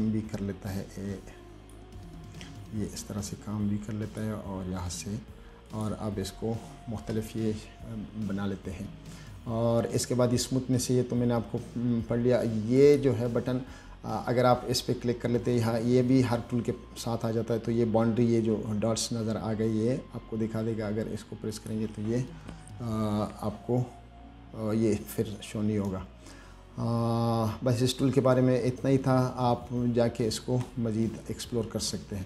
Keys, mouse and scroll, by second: 3.6-4.5 drag, 6.0 click, 13.0 click, 21.8 click, 25.2-25.5 scroll down 2, 25.8-26.1 scroll up 1, 25.9 middle click.